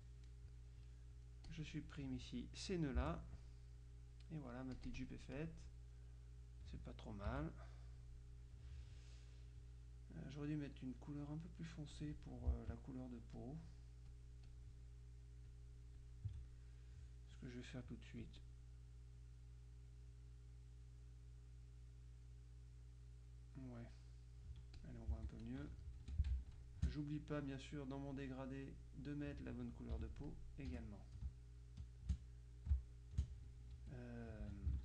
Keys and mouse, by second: 1.6-2.6 drag, 3.1 Delete, 3.9-6.1 drag, 7.4 KP_Subtract, 12.0 click, 12.7 shift+click, 13.5 click, 14.2 click, 15.5-16.6 drag, 18.3-24.1 drag, 24.8 click, 25.2 z, 25.8 click, 26.1 F2, 26.4 space, 26.5-28.0 drag, 26.9 space, 28.3 click, 30.1 F7, 30.4 click, 30.8 F1, 31.3 space, 32.9 space, 33.6 click, 34.3 F2.